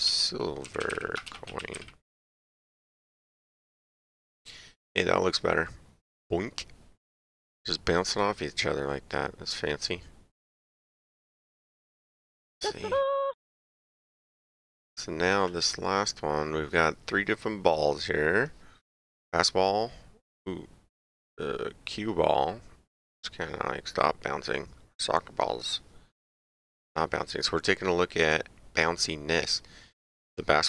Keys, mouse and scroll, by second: 0.0-1.8 typing, 3.2 click, 8.1 click, 9.8 click, 12.5 click, 13.7 Page_Down, 15.3 click.